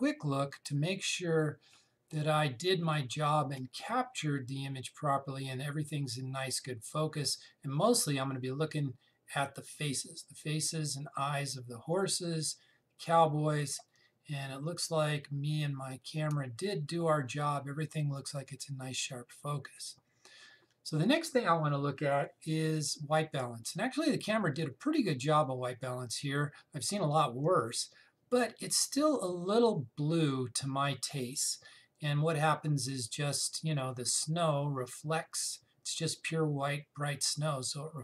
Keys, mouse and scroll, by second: 0.3 click, 4.3 space, 4.5 click, 4.8 space, 12.7 click, 12.9 space, 14.6 click, 14.8 space, 19.1 click.